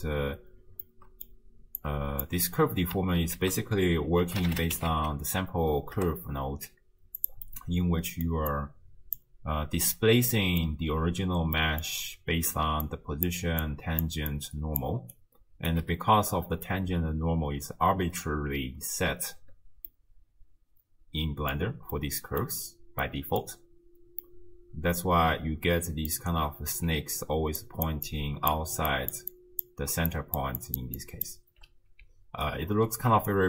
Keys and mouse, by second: 0.0 space, 0.9 click, 1.8 click, 3.4 ctrl+a, 7.5 click, 8.6 click, 10.3 click, 10.3 middle click, 11.6 click, 11.6 middle click, 12.7-13.5 d, 12.8 click, 13.6 click, 14.2 d, 14.3-15.1 d, 15.2 click, 15.7 d, 19.9-21.6 drag, 22.1 click, 23.1 click, 24.3-26.1 drag, 26.9-27.6 d, 27.6 click, 27.9 d, 28.0-31.5 d, 28.1 click, 29.1 click, 29.3 click, 30.4 click, 30.6 click, 31.0 click, 32.0 d, 32.5 right click, 33.3 d.